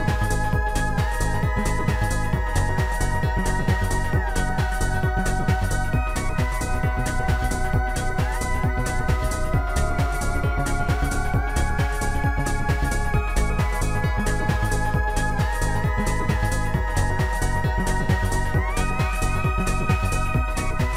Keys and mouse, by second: 3.5 click, 3.6 click, 4.3 right click, 8.0 click, 9.1 click, 10.9 shift+click, 13.8 shift+click, 17.3 click, 18.5 click, 19.3 click.